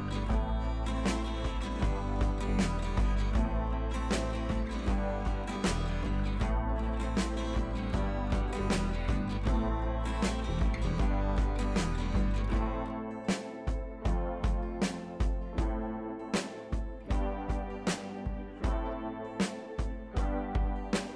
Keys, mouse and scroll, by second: 8.8-9.4 click, 12.4-21.1 drag.